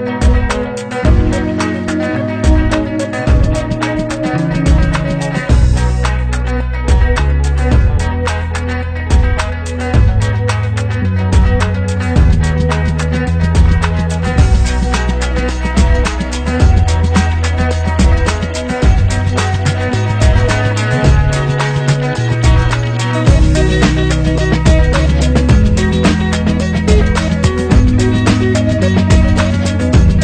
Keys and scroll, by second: 17.1 ctrl+z.